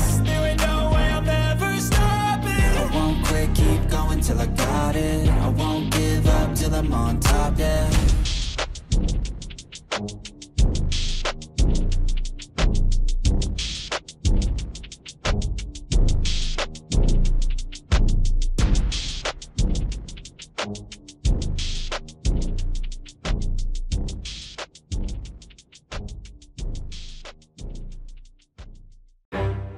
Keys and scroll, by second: 0.5 ctrl+z, 2.2 ctrl+z, 6.8 ctrl+z.